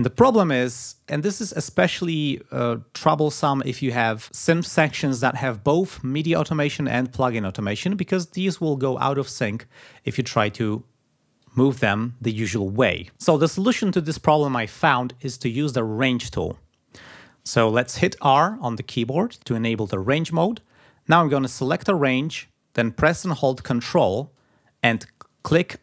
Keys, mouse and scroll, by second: 11.7 click, 18.7 r, 21.6-22.6 drag, 25.7 ctrl+click.